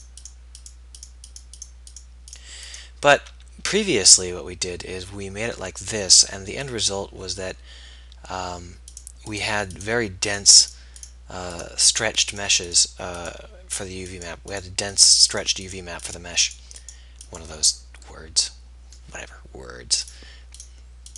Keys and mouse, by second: 19.1-21.0 middle drag.